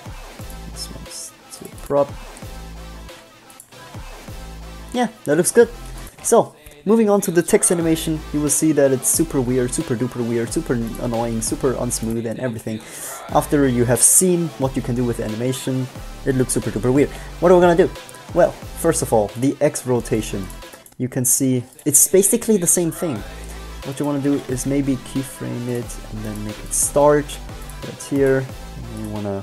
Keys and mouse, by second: 3.8-5.6 drag, 6.2-7.2 drag, 17.2-19.4 middle drag, 21.4-22.6 middle drag, 24.4 shift+d, 26.6 g, 28.6 g.